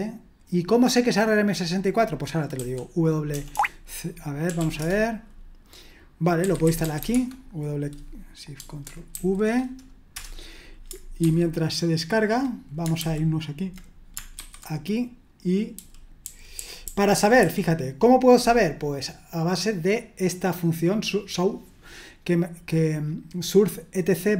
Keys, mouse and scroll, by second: 2.6-7.5 typing, 9.1 ctrl+v, 10.1 Return, 11.2 super+1, 13.0 super+h, 14.3 alt+1, 15.7-17.4 typing.